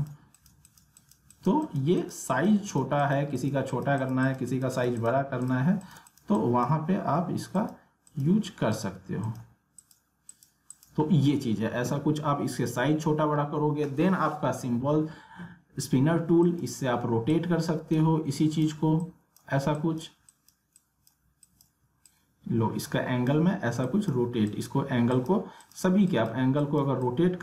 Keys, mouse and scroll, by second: 9.2 alt+click, 16.4-27.4 drag.